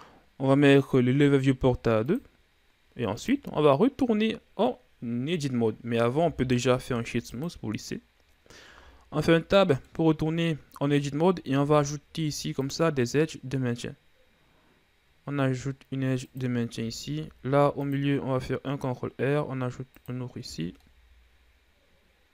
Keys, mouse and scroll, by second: 2.6-6.7 drag, 6.7 w, 9.2 Tab, 9.7 middle click, 10.7-12.1 scroll up 1, 12.1 ctrl+r, 17.5 ctrl+r, 21.0 Tab, 21.3-22.3 middle drag.